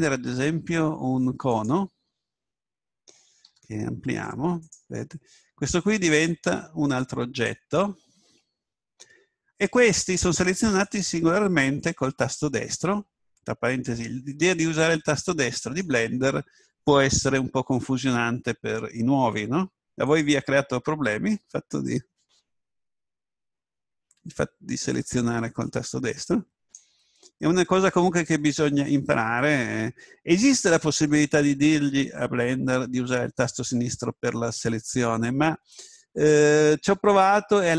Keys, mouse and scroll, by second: 4.1 s, 5.2-9.2 drag, 10.8 right click, 13.7-17.4 right drag, 26.6 right click, 36.4-37.7 right drag.